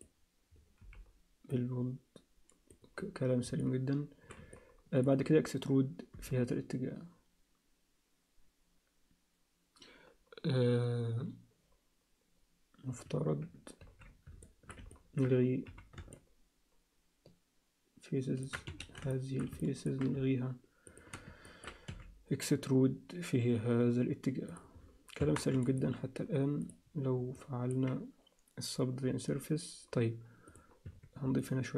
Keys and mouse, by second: 0.8 b, 3.6 alt+middle click, 4.6 ctrl+alt+middle click, 6.1 e, 13.8 ctrl+z, 14.4 alt+shift+middle click, 14.9 ctrl+alt+middle click, 15.7 c, 19.1 alt+shift+middle click, 19.6 ctrl+alt+middle click, 21.5 ctrl+alt+middle click, 21.9 e, 25.2 Tab, 25.6 alt+shift+middle click, 28.7 click, 30.5 click, 30.9 Tab, 31.4 alt+middle click.